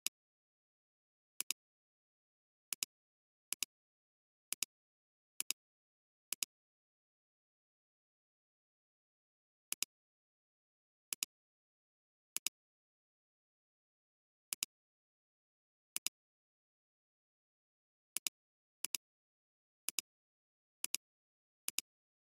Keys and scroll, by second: 5.3 space, 9.7 alt+space, 12.3 alt+space, 12.8 space.